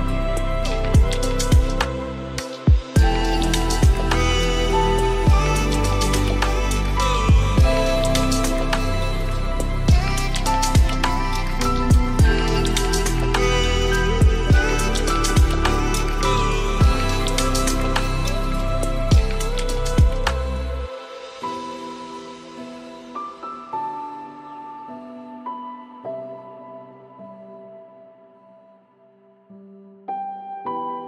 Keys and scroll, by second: 20.9 ctrl+shift+Return, 30.4 ctrl+space.